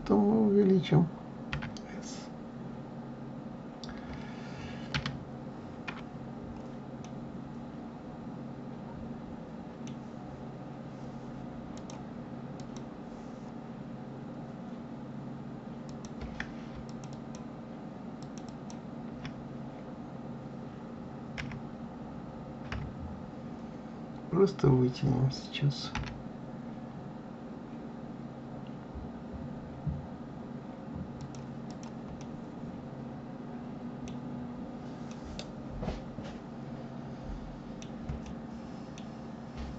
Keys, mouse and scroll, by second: 1.4 s, 6.9-10.0 middle drag, 11.7-14.1 drag, 14.1-15.8 scroll up 1, 15.8 click, 16.8 shift+click, 17.0 shift+click, 18.2 shift+click, 18.4 shift+click, 21.3 KP_1, 22.6 KP_3, 25.9 g, 31.6 click, 32.1-34.2 middle drag, 34.2-35.0 scroll down 2, 35.0-38.0 middle drag, 38.2-39.7 middle drag.